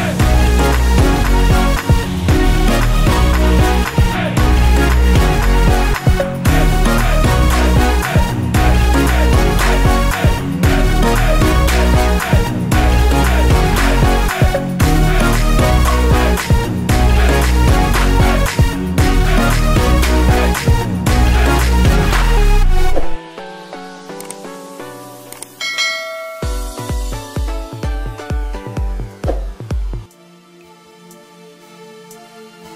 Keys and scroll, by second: 0.1 Up, 0.9 Down, 3.0 Down, 3.3 Up, 3.6 Down, 5.6 Down, 7.3 F9, 13.1 Return, 17.6 Return, 23.1 Return, 24.6 t, 30.9 Return, 32.4-32.7 typing.